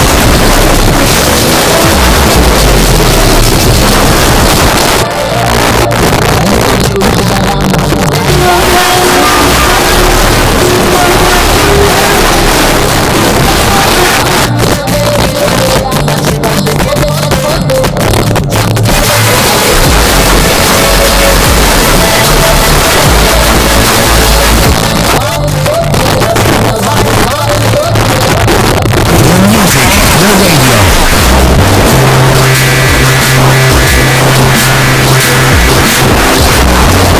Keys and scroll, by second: 4.7 Page_Down, 14.1 Page_Down, 24.7 Page_Down.